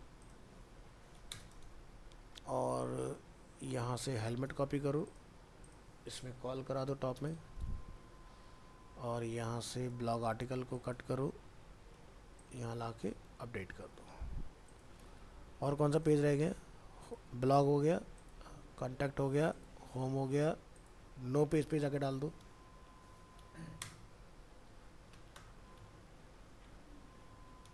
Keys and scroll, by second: 1.6 ctrl+v, 4.8 ctrl+c, 6.6 ctrl+Home, 7.6 ctrl+v, 10.2 ctrl+x, 13.3 ctrl+v, 13.6 ctrl+s, 27.2 ctrl+Home.